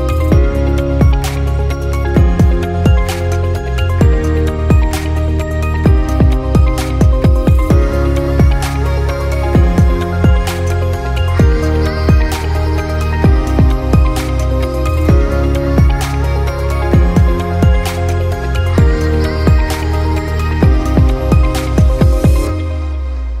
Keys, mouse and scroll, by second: 0.3 KP_0, 2.9-4.2 middle drag, 4.2 click, 5.3 click, 7.9 Tab, 8.6 a, 10.5 a, 11.5 r, 15.9 g, 19.5 middle click, 20.1 click, 21.2-22.1 drag, 22.5-23.4 middle drag.